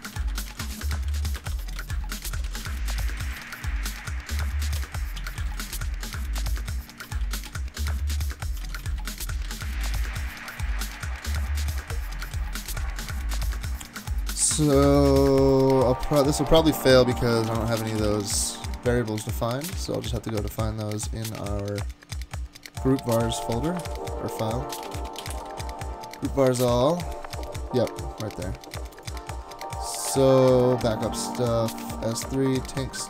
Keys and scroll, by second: 0.0-3.9 typing, 1.4 alt+BackSpace, 1.5 alt+BackSpace, 1.8 alt+BackSpace, 3.9 super+Right, 4.8 alt+BackSpace, 5.0-8.0 typing, 8.9 alt+Right, 9.0 alt+Right, 9.1 alt+Right, 10.6-11.3 typing, 12.2 super+s, 17.0-20.2 typing, 23.2 super+p, 23.3-26.0 typing, 26.6 Return.